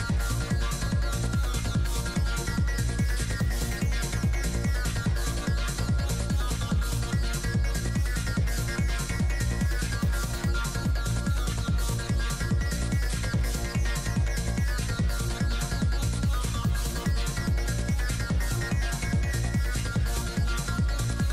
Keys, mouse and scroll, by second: 0.9 middle click, 1.9 click, 2.6 middle click, 3.5 f, 3.7-5.5 drag, 5.9 shift+f, 7.2-8.3 drag, 8.3 middle click, 9.2-10.2 drag, 9.5 right click, 9.9 middle click, 10.2 f, 10.4-12.1 drag, 12.1 middle click, 12.3 middle click, 12.9-13.9 drag, 12.9-13.9 right drag, 13.9 middle click, 14.8 middle click, 15.3 f, 16.0-17.2 drag, 17.2 shift+f, 17.7 click, 19.8-20.9 drag, 19.8 middle click, 20.9-21.3 middle drag.